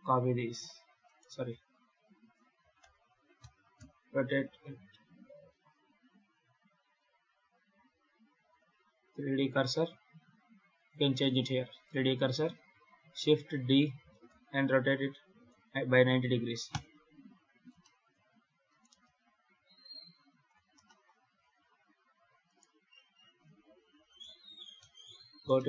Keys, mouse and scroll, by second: 1.4 ctrl+z, 2.5 shift+d, 4.8-5.3 scroll down 5, 5.3 ., 9.2-10.6 scroll up 3, 12.4 click, 13.8 shift+d, 17.5 scroll up 2, 17.7 shift+middle click, 18.6 right click, 18.7 g, 20.7 shift+middle click, 21.0 scroll down 2, 21.5 ctrl+s, 22.4 right click, 24.6 Tab, 25.1 scroll up 2, 25.4 shift+middle click.